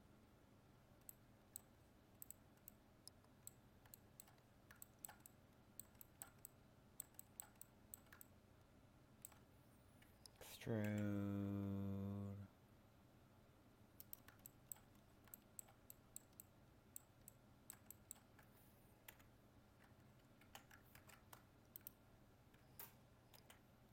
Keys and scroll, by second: 21.0 ctrl+Tab.